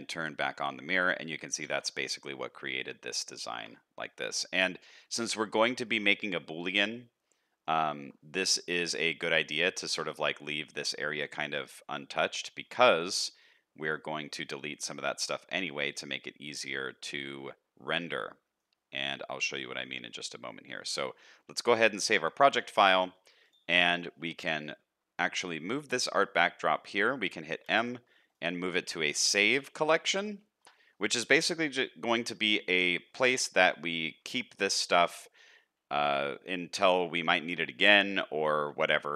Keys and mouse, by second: 1.3 middle click, 1.7 alt+a, 1.9 middle click, 2.6 middle click, 3.4 shift+middle click, 4.6 middle click, 5.2 shift+middle click, 5.8 shift+middle click, 7.5 middle click, 7.9 shift+middle click, 8.3 middle click, 9.2 shift+middle click, 10.6 shift+middle click, 10.9 middle click, 12.4 shift+middle click, 13.6 middle click, 15.1 shift+middle click, 16.1-18.6 middle drag, 18.9 shift+middle click, 21.1-21.6 middle drag, 22.0 ctrl+s, 22.3 shift+middle click, 22.7 middle click, 23.8 shift+middle click, 27.6 m.